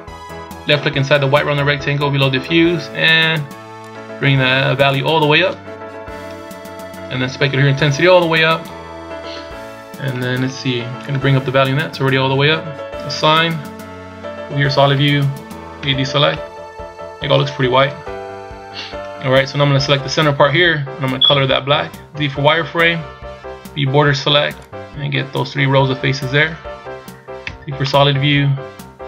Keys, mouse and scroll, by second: 1.3 click, 3.8 click, 6.6-6.9 scroll down 2, 7.8 click, 9.4-9.8 scroll up 2, 11.0 click, 13.1 click, 14.9 z, 15.8 a, 16.3 middle click, 17.9 KP_1, 20.6-21.0 scroll up 1, 22.1 z, 23.6 b, 27.4 z, 27.8 middle click.